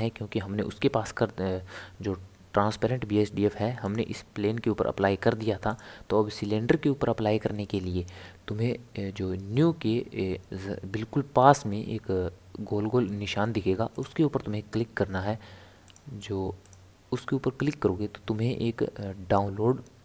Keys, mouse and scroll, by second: 3.8 click, 5.7 click, 15.7 click, 16.6-19.7 drag.